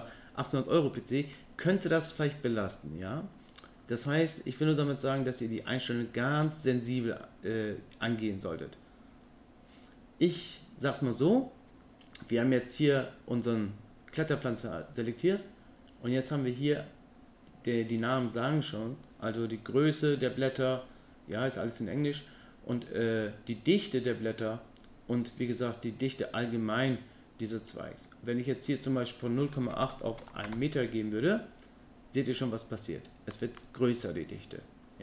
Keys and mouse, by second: 1.1 middle click, 28.6-31.0 drag.